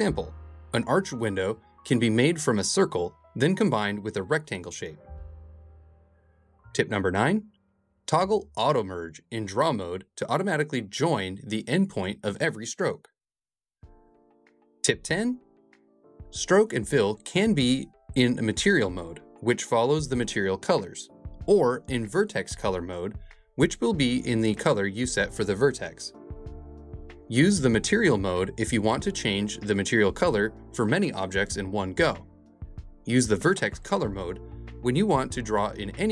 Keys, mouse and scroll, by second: 1.3 e, 4.5 f, 5.6 2, 6.5 s, 22.8 super+z, 23.2 click, 24.3 right click, 25.4 click, 26.5 right click, 27.5 click, 28.8 right click, 29.8-31.0 drag.